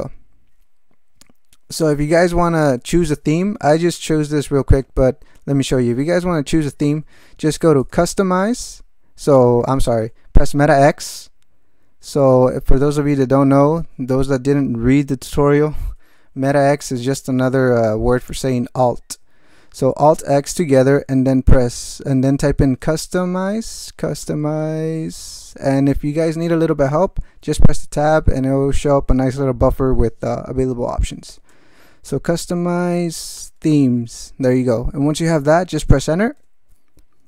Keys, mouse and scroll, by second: 6.8 alt+x, 7.6-9.5 typing, 10.0 alt+g, 10.6 alt+x, 21.7-24.5 typing, 31.3 i, 31.5 Tab, 32.6-33.7 typing, 36.3 Return.